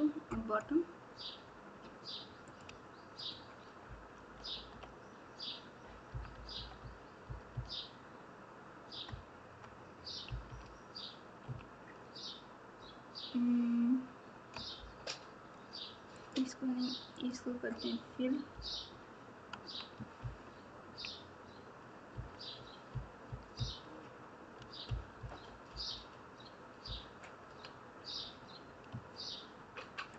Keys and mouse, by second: 2.4 click, 3.2 shift+click, 4.1 KP_8, 6.0-7.2 typing, 9.0 KP_Add, 16.1 shift+click, 17.1 shift+click, 18.5 KP_8, 20.1 ctrl+KP_2, 22.1 KP_6, 24.8 KP_4, 26.8 KP_6.